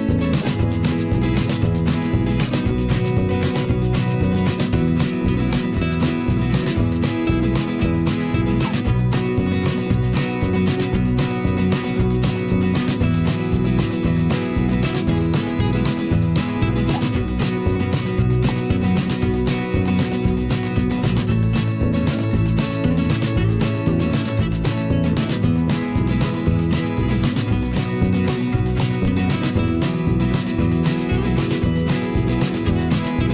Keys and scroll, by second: 0.0 v, 3.0 p, 5.3 ctrl+z, 6.4 v, 6.8 Delete, 8.9 b, 10.2 ctrl+z, 11.7 ctrl+z, 13.7 v, 14.1 Delete, 14.6 b, 15.0 ctrl+z, 28.1 ctrl+z.